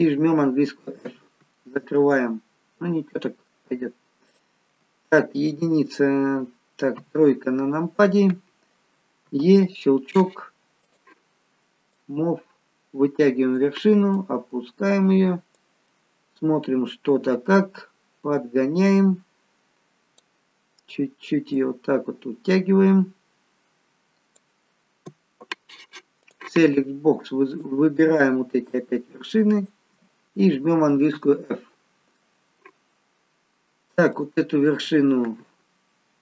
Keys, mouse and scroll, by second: 1.0 f, 2.0 middle click, 4.3 click, 6.9 KP_3, 9.2 e, 10.9 click, 11.9 click, 14.8 click, 15.8 middle click, 19.7 click, 21.6 click, 26.2 click, 27.4 shift+click, 28.7 shift+click, 29.6 shift+click, 31.2 f, 34.1 click.